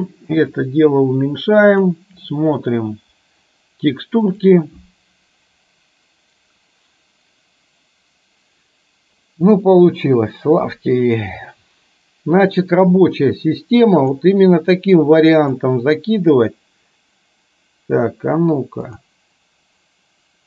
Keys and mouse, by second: 0.6-1.9 drag, 8.4 click, 13.4 click, 15.6 click.